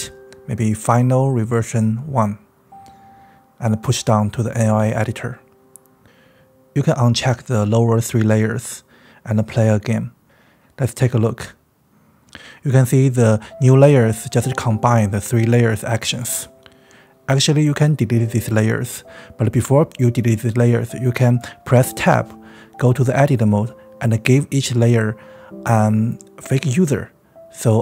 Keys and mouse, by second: 5.5 click, 8.0 drag, 8.4 click, 9.0 drag, 10.0 click, 10.3 space, 15.6 space, 16.6 click, 18.1 ctrl+z, 18.2 click, 18.8 Tab, 20.0 click, 20.9 click, 22.3 Tab, 25.3 Tab, 25.9 click, 26.5 Tab.